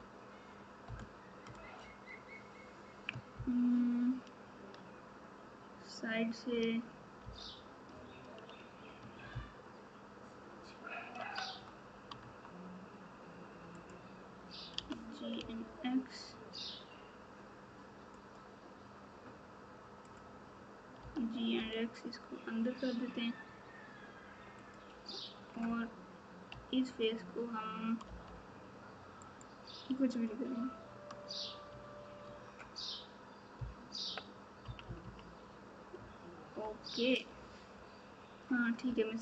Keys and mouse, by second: 0.8 KP_Subtract, 3.3 ctrl+KP_6, 3.8 ctrl+KP_6, 7.2 KP_8, 9.3 ctrl+KP_8, 9.8 ctrl+KP_8, 20.0 click, 26.5 3, 33.5 KP_4, 34.6 KP_6, 34.8 KP_6, 35.0 KP_6, 35.9 KP_Subtract, 36.5 KP_Subtract, 36.5 KP_Subtract, 37.2 Tab.